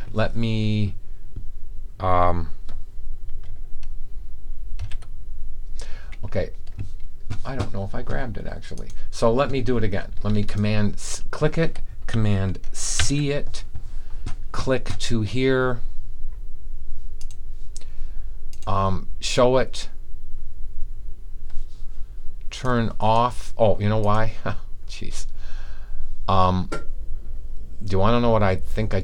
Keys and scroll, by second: 4.8 super+v, 12.9 super+c.